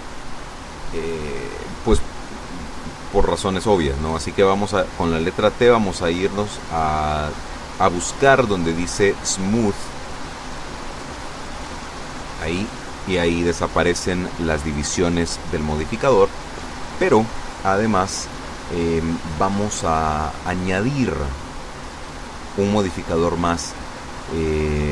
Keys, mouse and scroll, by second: 3.6 n, 4.8 t, 8.0-8.7 scroll up 2, 8.7-9.2 scroll down 2, 9.3-9.7 scroll down 2, 10.5 right click, 12.7 click, 24.0 middle click.